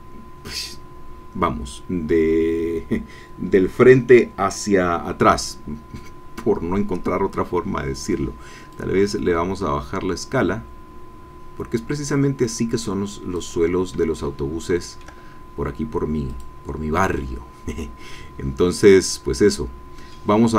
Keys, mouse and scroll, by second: 8.7-13.5 drag, 14.2-15.2 shift+middle drag, 16.3 click, 18.9-19.3 scroll up 1, 19.5 middle click, 20.1 scroll up 1.